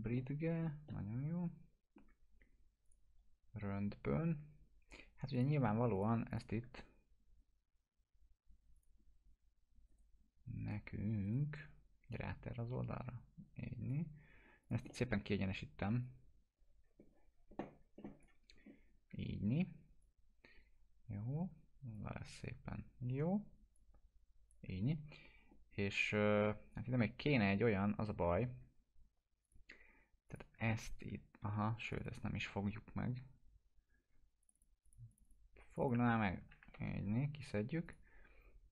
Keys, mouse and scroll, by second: 0.1-0.7 alt+middle drag, 2.8 click, 5.3 click, 6.3 shift+click, 9.9 right click, 12.1-14.0 drag, 14.8-15.7 typing, 14.9 middle click, 16.0-18.5 drag, 19.1 w, 20.0-22.2 drag, 22.7 scroll up 1, 23.7-24.7 drag, 26.3-28.2 alt+middle drag, 29.4 click, 31.5 2, 31.8 click, 34.4 click, 36.6 ctrl+BackSpace, 37.8 click.